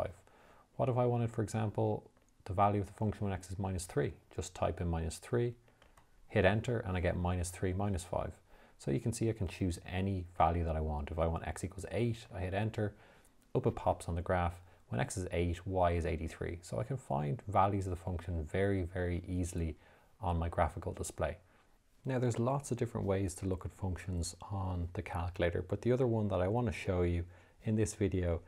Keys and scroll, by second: 4.0 3, 6.1 Return, 10.7 8, 12.5 Return.